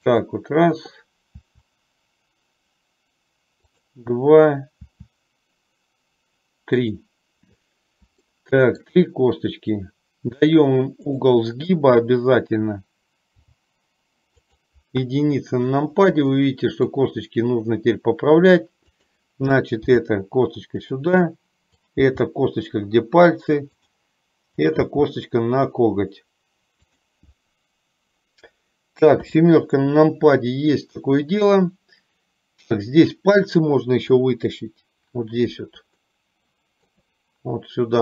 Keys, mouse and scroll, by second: 1.5 e, 5.0 e, 8.4 shift+middle click, 11.1 click, 13.5 g, 15.1 KP_1, 16.5 shift+middle click, 19.0 click, 20.0 g, 21.9 click, 22.4 g, 24.8 click, 29.3 KP_7, 36.1-37.1 shift+middle drag.